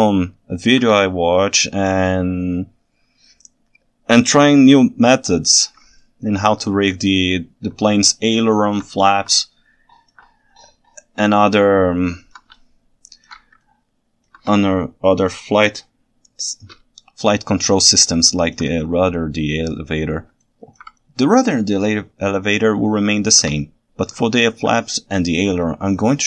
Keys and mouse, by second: 0.0-0.8 ctrl+alt+right drag, 6.0-6.5 ctrl+alt+right drag, 7.8-8.8 ctrl+alt+drag, 9.5-10.2 ctrl+alt+drag, 12.0-12.4 ctrl+alt+right drag, 12.6-13.3 ctrl+shift+right drag, 13.7-14.3 ctrl+alt+right drag, 18.1 ctrl+alt+click, 20.5 ctrl+alt+click, 22.7-23.4 ctrl+alt+right drag, 24.3-24.7 ctrl+alt+right drag, 25.7-26.0 ctrl+alt+right drag.